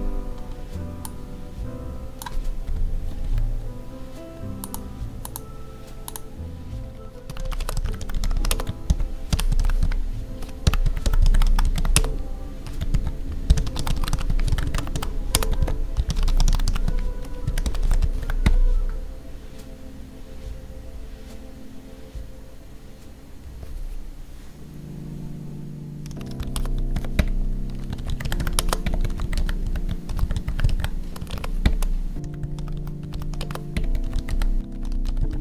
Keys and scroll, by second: 2.6 Delete, 3.2 ctrl+s, 7.5 space, 8.4 space, 11.9 space, 15.3 space, 26.9 space, 28.5 space, 31.2 space, 33.3 space.